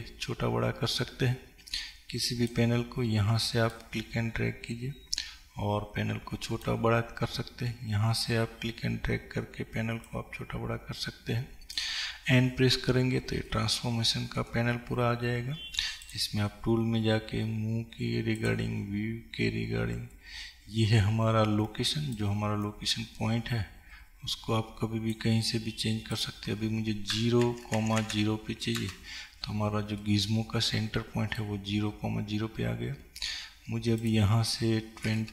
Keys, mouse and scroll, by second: 5.9-30.1 drag, 12.8 n, 30.1-35.3 middle drag, 31.9-32.4 scroll up 2, 32.4-34.2 scroll down 2, 34.2-35.3 scroll down 1.